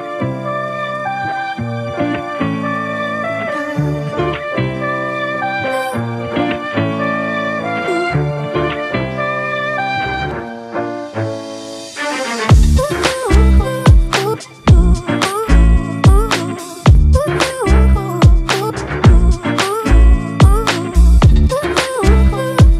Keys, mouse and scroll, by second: 13.4 Return, 19.2 ctrl+t, 21.9 Return.